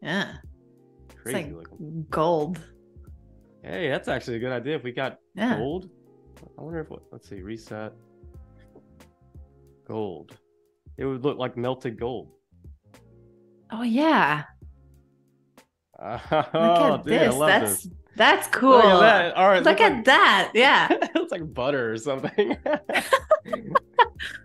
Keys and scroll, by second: 9.3-10.4 typing, 10.8 Return.